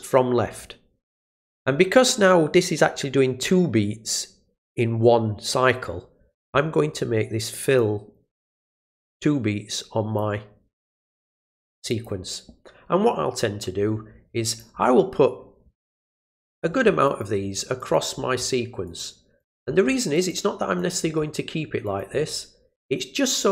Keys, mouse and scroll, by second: 7.7-10.1 drag, 11.9 click, 14.5 click, 16.3 click, 17.0 click, 17.8 ctrl+click, 18.8 click, 19.4 click, 20.1 click, 20.8 click, 21.8 click.